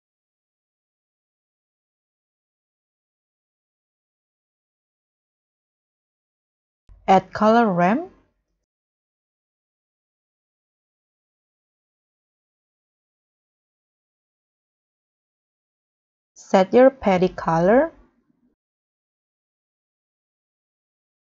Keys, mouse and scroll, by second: 3.8-5.1 scroll down 6, 7.8-8.3 scroll down 1, 8.3 shift+a, 9.6 c, 9.7 o, 9.8 l, 10.0 o, 13.4-14.5 scroll up 9.